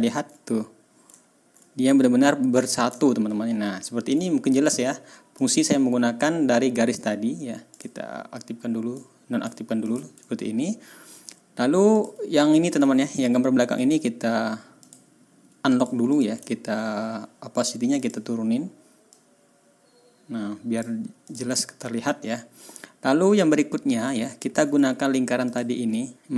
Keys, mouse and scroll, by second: 1.1-1.5 ctrl+scroll up 2, 2.9-4.0 ctrl+scroll down 2, 5.3 click, 7.7 click, 8.9 click, 9.8 click, 10.3 ctrl+scroll up 2, 10.7-11.2 ctrl+scroll down 4, 11.9 click, 13.0 ctrl+scroll up 2, 13.7 right click, 14.8 click, 15.7 click, 16.1 click, 16.4 ctrl+scroll down 2, 17.9 click, 19.1-20.9 drag, 20.9-21.2 scroll up 2, 21.2 click, 21.6 ctrl+scroll up 2, 22.2 ctrl+scroll down 2, 22.6-23.0 ctrl+scroll up 2, 23.3 ctrl+scroll down 2, 23.8-24.1 ctrl+scroll up 2, 24.2 ctrl+scroll down 2, 25.4 click.